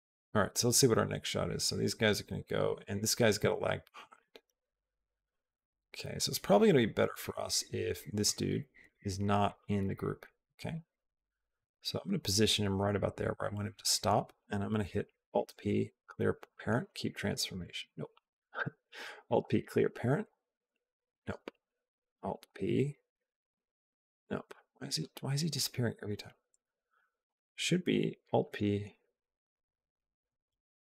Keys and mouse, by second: 4.0-8.1 drag, 8.7 click, 10.6-12.6 drag, 15.0 alt+p, 18.0 ctrl+z, 19.2 alt+p, 20.1 Up, 21.3 ctrl+z, 22.3 alt+p, 22.9 Up, 24.4 ctrl+z, 27.1 alt+p, 27.8 Down.